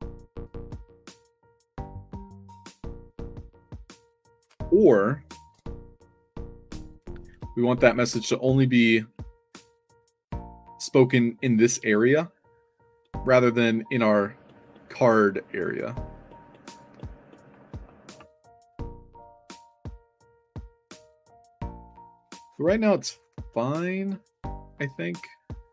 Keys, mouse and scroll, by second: 5.4 Tab, 5.4 q, 7.4-7.7 alt+drag, 9.5 s, 12.2 click, 12.9 click, 13.5 click, 13.7 drag, 14.1 click, 16.6 click, 16.9 click, 17.9-18.6 scroll down 2, 19.2-19.6 drag, 20.5-20.9 middle drag, 21.7-22.9 drag, 23.0 click.